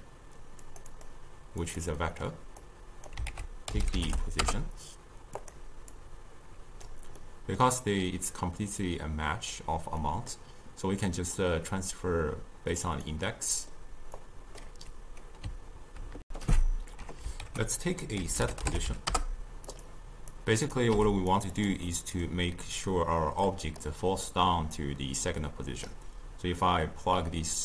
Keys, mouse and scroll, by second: 1.0-2.1 drag, 2.1-2.7 middle drag, 2.7 click, 3.4 ctrl+a, 6.0-7.3 drag, 7.3-11.2 middle drag, 11.2 click, 13.4 middle click, 14.3 click, 16.3 ctrl+shift+q, 17.5 ctrl+a, 20.4-21.0 drag, 21.0 g, 21.6 click, 21.9-23.5 middle drag, 23.5 click, 24.8 click.